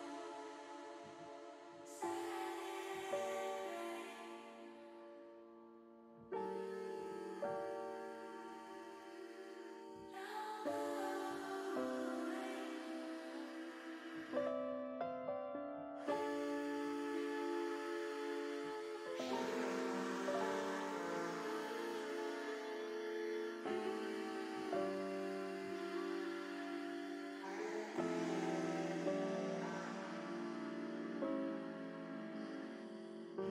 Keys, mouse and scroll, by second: 0.1 a, 1.0 click, 1.9 l, 6.1 click, 7.1 l, 9.0 click, 9.5 middle click, 9.7 middle click, 10.8 middle click, 12.3 middle click, 13.0 shift+middle click, 15.3 click, 16.2 alt+shift+click, 17.8 ctrl+KP_Add, 18.3 ctrl+KP_Add, 18.8 ctrl+KP_Add, 19.2 ctrl+KP_Add, 20.7 ctrl+KP_Subtract, 22.0 click, 22.6 middle click, 23.7 middle click, 24.6 shift+middle click, 25.1 middle click, 27.7 click, 28.7 alt+shift+click, 29.5 click, 31.0 click, 32.1 alt+shift+click, 33.0 click.